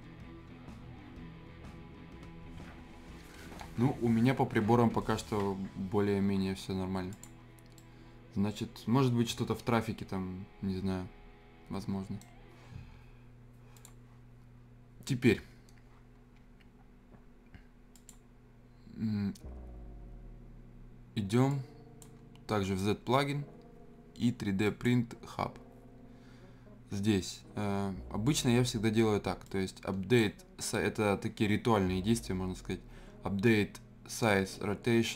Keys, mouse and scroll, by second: 7.1 click, 7.8-13.8 right drag, 13.8 click, 17.9 click, 21.5-24.4 drag, 24.6 click, 29.4-32.7 drag.